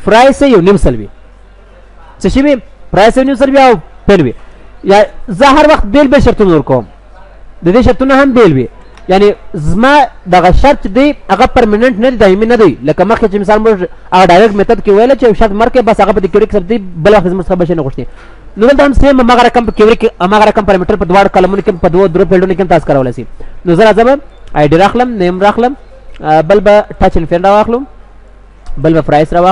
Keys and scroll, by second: 8.3 ctrl+w, 9.0 ctrl+w.